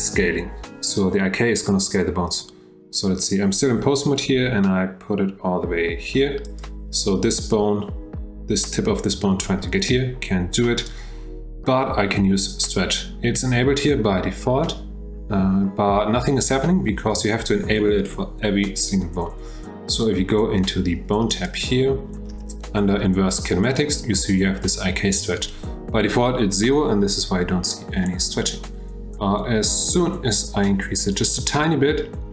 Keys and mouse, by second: 2.4 click, 3.3 click, 4.3 g, 10.7 click, 21.3 click, 28.5-31.2 drag.